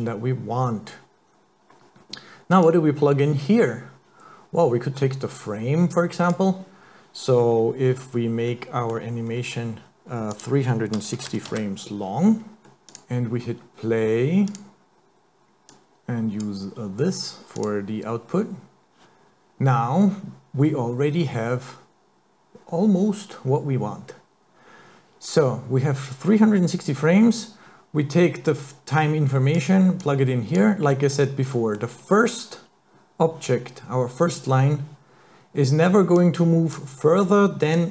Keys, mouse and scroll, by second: 2.6 click, 6.3 click, 7.3-8.2 scroll down 8, 8.5 middle click, 9.3 scroll down 2, 10.4 click, 12.7 middle click, 12.9 click, 14.5 click, 14.8 click, 15.8 click, 17.6 click, 28.2 click, 30.0 click, 31.1-31.4 scroll up 3, 31.6 middle click, 36.2 click, 37.8 click.